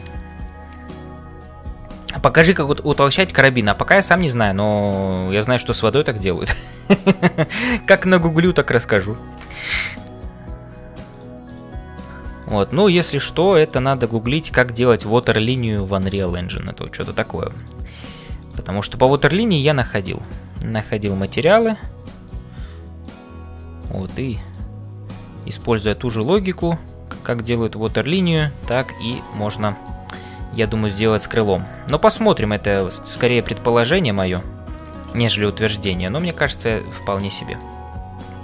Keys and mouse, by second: 3.2 shift+middle click, 5.0 click, 5.6-7.2 middle drag, 8.2-9.5 middle drag, 11.5 click, 12.1 g, 14.4 g, 15.9 g, 18.8 click, 19.2 g, 20.1 click, 20.8 g, 21.9 g, 23.1 click, 23.5 g, 25.0 g, 26.2 click, 26.8 g, 27.8 click, 29.2 shift+middle click, 30.6 g, 32.2 g, 32.8 middle click, 33.5 click, 34.1 g, 35.2 middle click, 35.8 click, 36.4 g, 37.5 click, 38.0 g.